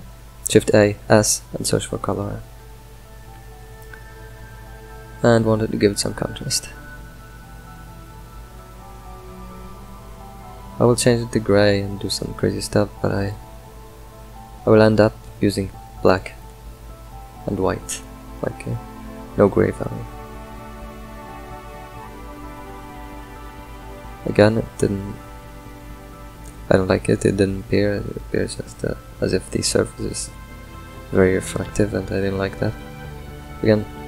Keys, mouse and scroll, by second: 4.6 scroll down 4, 5.1-6.3 middle drag, 6.3-9.3 drag, 9.7 drag, 11.0 click, 11.7 click, 12.8 drag, 14.7-16.9 middle drag, 16.9 ctrl+shift+click, 19.5-22.9 middle drag, 22.9-23.5 scroll down 5, 23.5 middle click, 24.3-24.7 scroll up 6, 24.9-26.7 middle drag, 26.7-30.5 drag, 30.9 click, 32.6 click.